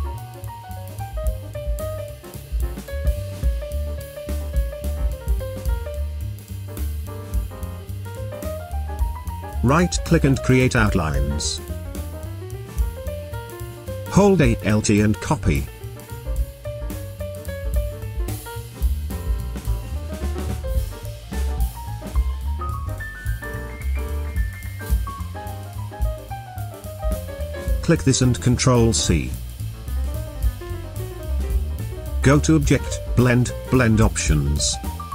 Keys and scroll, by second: 9.5 space, 30.1 ctrl+c.